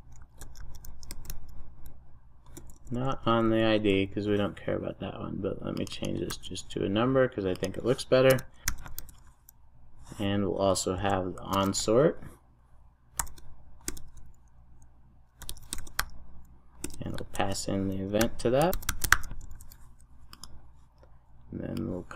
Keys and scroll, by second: 8.9 super+s, 13.8 Return, 20.1 super+s.